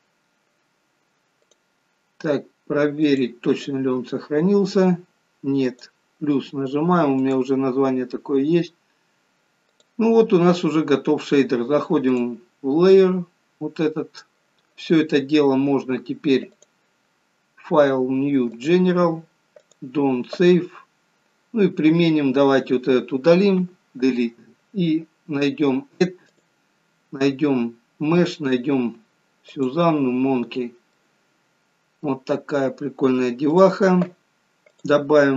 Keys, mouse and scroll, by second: 12.3 click, 12.3-12.9 scroll up 2, 13.3-13.6 scroll up 2, 13.8 middle click, 16.5 click.